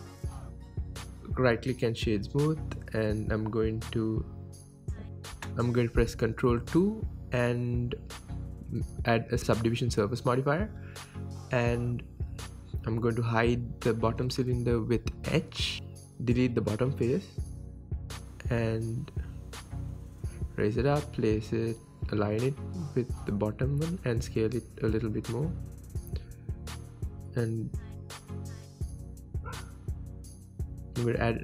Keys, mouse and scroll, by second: 0.9-2.5 right drag, 2.5-4.8 drag, 5.7 g, 6.2 click, 6.3 Tab, 6.5-9.6 middle drag, 7.0 ctrl+2, 7.4 Tab, 8.5 ctrl+2, 8.9 Tab, 9.6 alt+click, 10.4 ctrl+b, 11.5 click, 11.6 Tab, 11.8-12.7 scroll down 1, 12.7 Tab, 13.6 click, 14.1 h, 14.2 click, 14.3 Tab, 14.5 middle click, 14.8 click, 15.0 middle click, 15.6 click, 16.3 x, 16.7 Tab, 16.9-18.9 middle drag, 18.1 alt+h, 18.4 Tab, 18.9-19.4 drag, 19.4 KP_1, 19.8 g, 22.2 click, 22.3-24.8 middle drag, 22.6 scroll up 2, 23.3 s, 24.8 click, 25.0-27.3 middle drag, 26.0 KP_1, 26.5 g, 27.3 click, 27.6-29.1 middle drag, 27.9 scroll down 2, 28.3 scroll up 2, 28.6 s, 29.1 click, 29.4 scroll down 2, 29.6-31.4 middle drag, 29.9 KP_1, 30.2-30.7 scroll down 2, 30.7 shift+a.